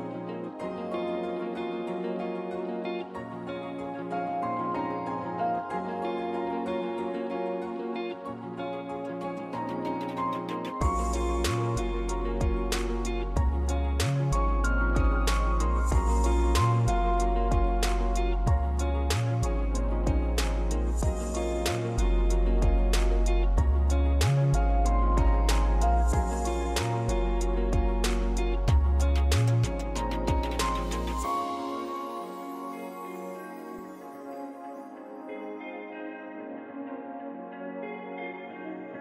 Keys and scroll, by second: 5.4-6.4 typing, 11.2-12.6 typing, 13.0 ctrl+s, 13.8 Tab, 15.9-17.5 typing, 18.7 r, 20.1-20.9 typing, 22.7 r, 26.6 Tab, 26.6-29.7 typing, 28.0 Return, 28.2 Tab, 31.0 Tab, 31.2-32.0 typing, 32.1 Return, 32.4 Return, 34.8 r, 37.3-38.1 typing.